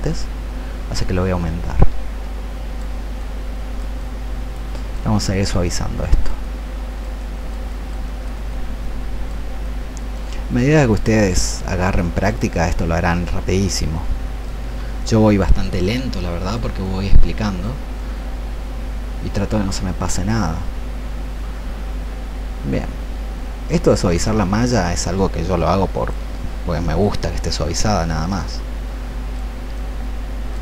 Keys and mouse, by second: 1.0-2.7 shift+drag, 3.1-4.8 shift+drag, 5.3-7.0 drag, 7.9 shift+click, 8.7 shift+click, 9.7 shift+click, 10.5 click, 11.4 shift+click, 12.3-14.4 shift+drag, 15.0 shift+click, 15.9 shift+click, 16.7 click, 19.7-23.8 shift+drag, 24.1-26.7 drag, 28.2 shift+click, 29.6 shift+click.